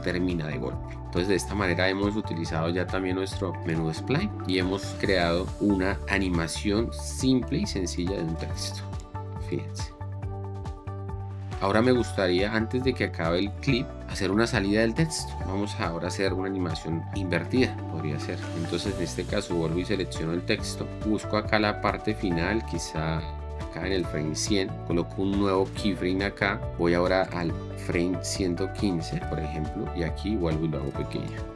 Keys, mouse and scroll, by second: 5.5 shift+4, 8.0 space, 13.2 space, 14.0 shift+4, 16.5 shift+5, 28.4 KP_1, 28.5 Return.